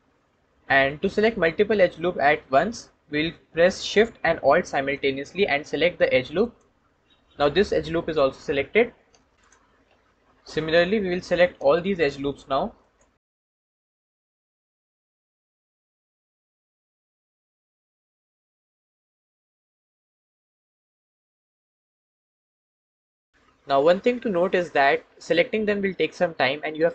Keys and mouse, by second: 12.6 alt+shift+click, 13.6 ctrl+z, 16.3 ctrl+z, 17.6 ctrl+alt+shift+z, 18.6 click, 19.0 ctrl+z, 20.2 ctrl+alt+shift+z, 20.9 click, 22.3 click, 23.6 middle click, 24.2-26.9 drag.